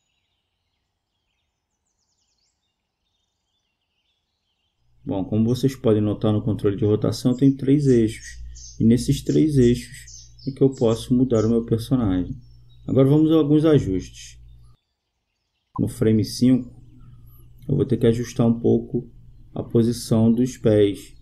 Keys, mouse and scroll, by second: 1.6-3.5 drag, 5.0-6.8 right drag, 7.6-10.7 drag, 15.2-16.2 drag, 16.5 click.